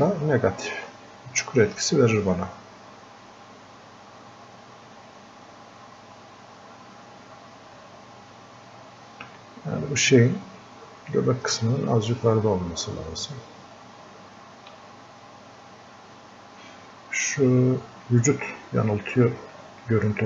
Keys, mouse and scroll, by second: 2.8-4.8 alt+drag, 4.8-9.2 alt+drag, 14.9-19.0 drag, 19.9 click.